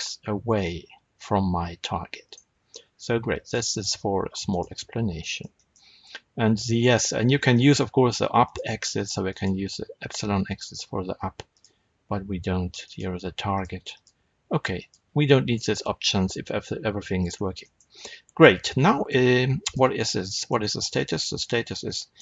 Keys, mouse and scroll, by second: 2.2 right click, 3.3 click, 4.4 click, 5.1-8.3 shift+middle drag, 8.3-12.8 drag, 13.4 click, 13.8-17.5 drag, 17.2-17.5 scroll up 2, 17.5-19.5 shift+middle drag, 19.5 click, 19.9 scroll down 2, 20.2-21.0 shift+middle drag, 20.7 scroll down 2, 21.7 r.